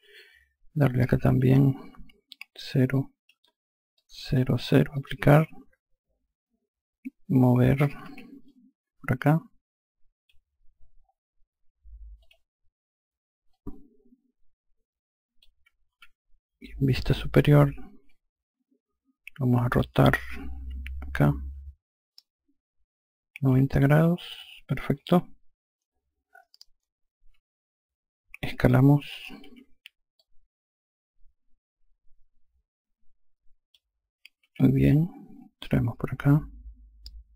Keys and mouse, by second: 0.8 click, 2.4 KP_0, 2.8 click, 3.2 KP_0, 3.8 click, 4.3 KP_0, 4.8 click, 7.9 e, 8.3 click, 12.1 click, 13.4 click, 15.8 F1, 17.9 click, 19.8 r, 21.0 click, 24.8 F3, 30.0 click, 34.3 e, 34.7 click.